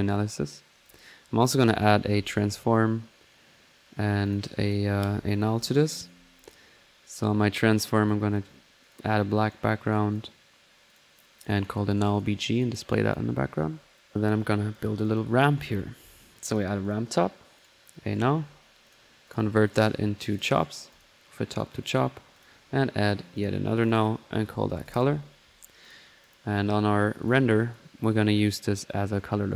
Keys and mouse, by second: 0.8 drag, 1.7 right click, 2.9-3.7 typing, 4.3-5.0 drag, 5.9-6.7 alt+drag, 7.1 alt+click, 7.9 click, 8.8 click, 9.3 right click, 9.4 drag, 9.4 typing, 9.9 click, 10.1 click, 10.9-11.3 drag, 10.9-11.3 typing, 11.4 click, 12.5 click, 14.0 click, 14.4 click, 15.0 click, 15.0-15.9 typing, 16.5-17.4 drag, 17.6 right click, 18.9 click, 19.3-19.7 drag, 19.7 right click, 20.3-22.8 drag, 23.4 alt+drag, 23.8 alt+click, 24.7 typing, 25.8 click, 27.2 click, 28.2-29.4 drag.